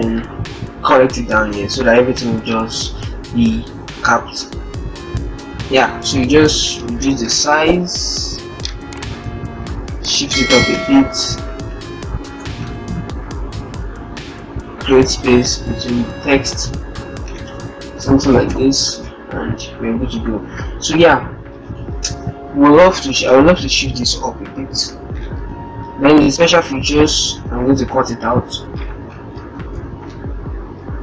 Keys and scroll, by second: 3.0 alt+Down, 4.5 alt+Down, 5.2 alt+Down, 5.7 ctrl+Return, 8.2 ctrl+shift+Up, 9.6 ctrl+shift+Up, 12.1 ctrl+Return, 13.6 Down, 13.8 Down, 14.0 Down, 14.7 Down, 15.3 Down, 15.6 Down, 29.2 shift+End, 29.6 ctrl+shift+x.